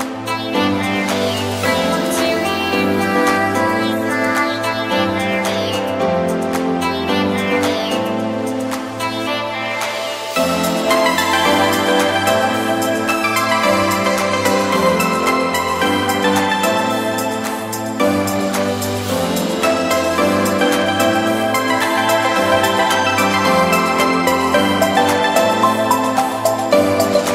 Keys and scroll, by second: 0.9 [, 3.1 ], 7.1 space, 7.3 super+v, 7.7 super+j, 9.8 x, 10.3 alt+Delete, 12.3 super+[, 14.1 b, 14.8 ], 16.5 x, 23.1 v.